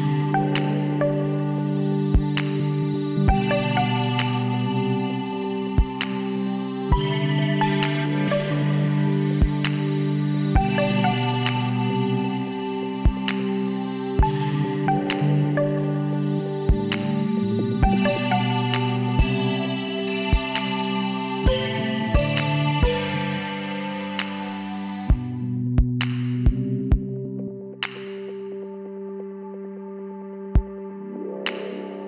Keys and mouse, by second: 1.3 KP_7, 2.0 z, 5.5-7.3 drag, 7.9 z, 9.4 middle click, 11.3 middle click, 13.0 click, 14.0 KP_7, 14.3 click, 14.6 middle click, 15.4 z, 16.1 click, 17.9 shift+s, 19.3 shift+a, 22.3 s, 24.3 s, 25.6 KP_1, 27.9 click, 28.3 b, 29.2 b, 31.2-32.0 drag.